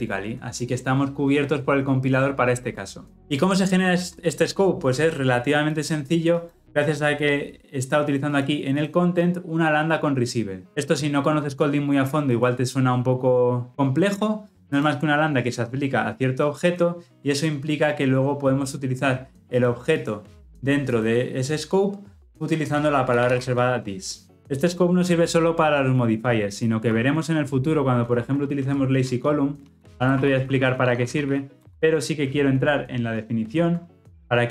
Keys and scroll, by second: 3.7 ctrl+alt+Left, 17.0 ctrl+alt+Left, 31.7 Return, 33.3 ctrl+b.